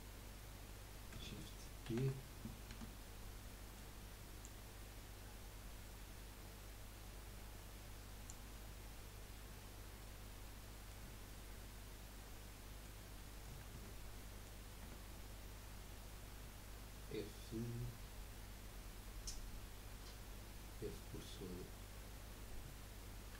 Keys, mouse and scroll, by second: 1.8 shift+d, 3.6 middle click, 4.4 click, 8.5-11.6 middle drag, 12.1-13.7 middle drag, 13.7 Tab, 14.2 middle click, 14.9 Tab.